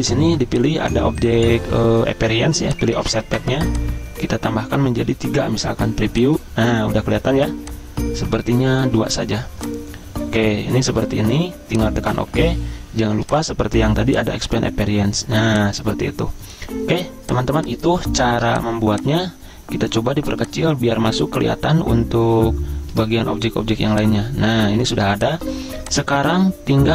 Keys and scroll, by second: 5.1 3, 8.6 2, 23.8 z, 25.0 v.